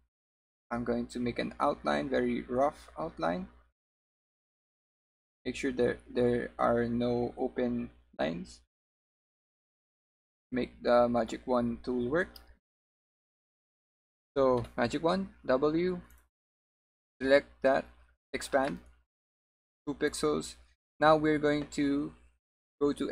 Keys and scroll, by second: 14.7 w.